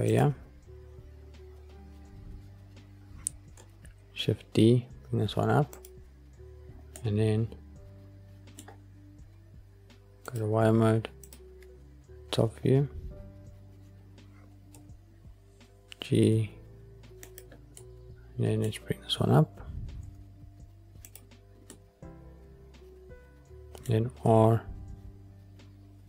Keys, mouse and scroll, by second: 0.0-0.4 drag, 0.4 scroll down 2, 1.9 scroll up 2, 2.6-3.0 scroll up 1, 3.9 shift+d, 5.7 click, 6.9-8.5 middle drag, 10.2 click, 11.2 click, 12.7 scroll down 2, 14.6 g, 17.2 click, 17.7-18.7 middle drag, 20.0 g, 21.0 click, 21.6-23.8 middle drag, 24.1 r.